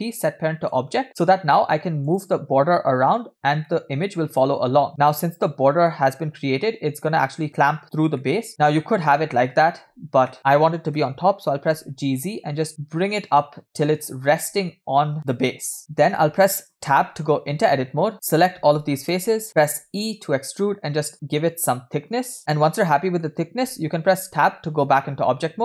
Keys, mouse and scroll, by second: 3.8-5.9 middle drag, 6.6-12.4 middle drag, 15.8-16.9 middle drag, 16.9 Tab, 19.1 alt+shift+click, 19.9 e, 22.4-24.2 shift+middle drag, 22.4 scroll down 2, 24.2 Tab.